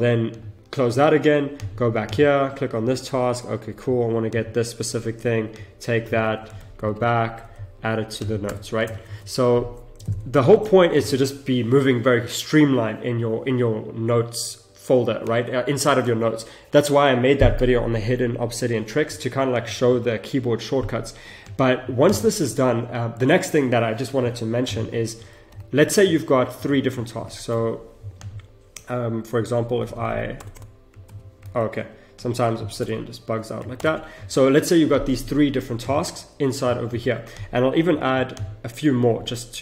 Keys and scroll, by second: 6.0 shift+c, 6.8 ctrl+alt+Left, 8.5 Return, 9.1 ctrl+shift+v, 10.4 Return, 25.1 Return, 25.5 ctrl+alt+Left, 27.1 ctrl+shift+Left, 29.6 Left, 30.4 Return, 31.0 ctrl+z, 31.5 ctrl+z, 32.7 BackSpace, 33.8 ctrl+Return.